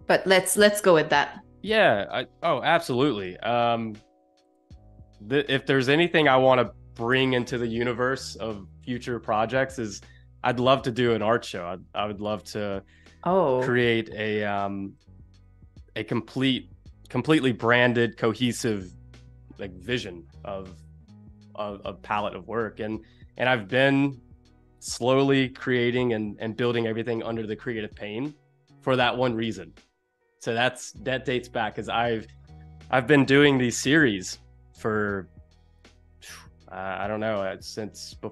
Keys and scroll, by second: 2.8 super+z, 3.2 space, 4.5 a, 16.0 space, 17.5 v, 33.9 super+g.